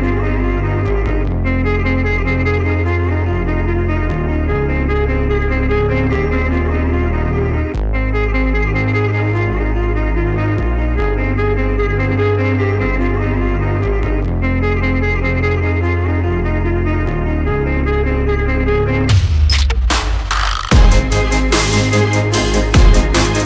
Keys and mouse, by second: 1.2 g, 3.7 shift+click, 3.7 shift+right click, 4.0 shift+middle click, 4.6 shift+middle click, 5.0-5.7 middle drag, 5.9-6.4 shift+middle drag, 7.4 shift+click, 7.4 shift+right click, 8.7 click, 9.2 Tab, 10.8 s, 14.9 click, 15.5-17.3 middle drag, 17.8-19.0 middle drag, 19.6 middle click, 20.4 drag, 20.9 shift+middle drag, 21.2-23.3 middle drag.